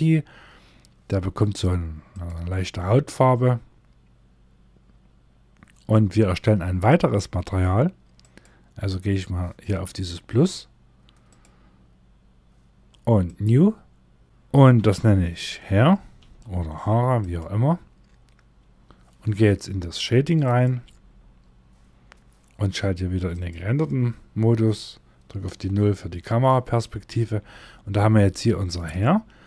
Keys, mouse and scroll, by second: 12.1 click.